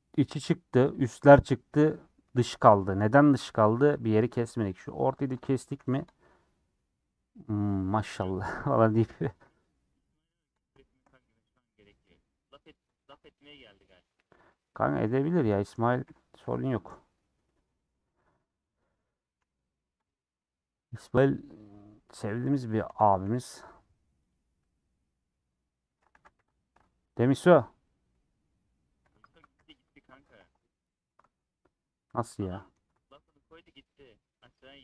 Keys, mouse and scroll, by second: 4.7 click, 5.6 a, 5.9 u, 9.2-10.6 middle drag, 10.6 click, 10.8-12.9 shift+middle drag, 12.9 ctrl+click, 13.5 middle click, 13.8-14.2 scroll up 2, 14.8 click, 15.3 a, 16.3 u, 17.8-20.0 middle drag, 20.0 click, 21.8 ctrl+click, 22.4 ctrl+click, 23.0 a, 23.6 u, 24.6 scroll down 2, 24.8-26.2 middle drag, 26.2 a, 26.4 u, 28.2-29.6 middle drag, 29.6 /, 30.1 Tab, 30.4 h, 32.5 h.